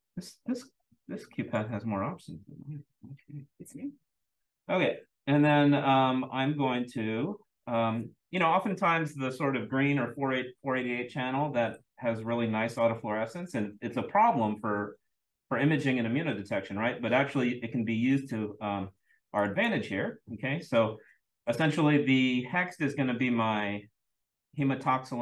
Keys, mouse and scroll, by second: 1.3 click, 3.0 click, 19.4 click.